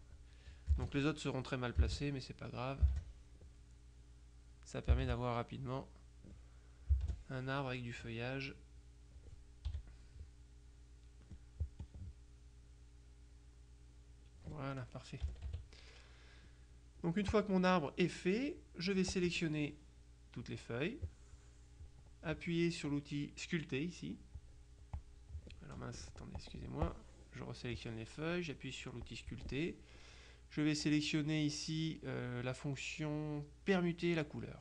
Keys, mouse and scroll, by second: 0.8 space, 1.9 space, 2.9 space, 5.0 space, 7.0 space, 9.8 h, 11.9-15.0 drag, 15.4 KP_Subtract, 16.6-18.0 drag, 19.2-21.0 drag, 24.4-25.8 drag, 26.4 click, 29.1 click.